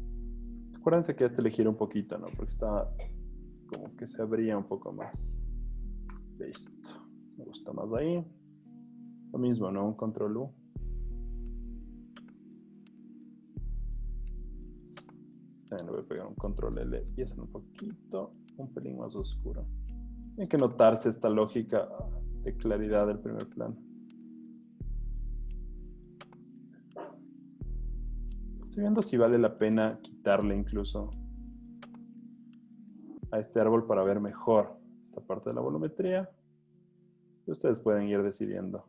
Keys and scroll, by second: 6.3 Return, 7.4 z, 9.0 super+u, 15.8 super+l, 21.6 v, 28.9 super+z, 35.1 super+z.